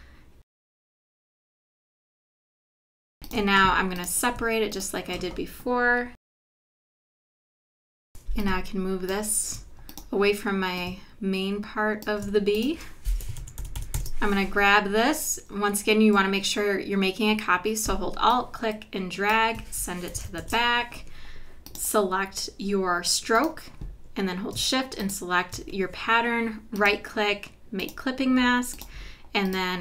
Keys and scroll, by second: 3.1 v, 6.9 shift+super+g, 7.5 BackSpace, 13.6 super+-, 20.4 shift+super+[.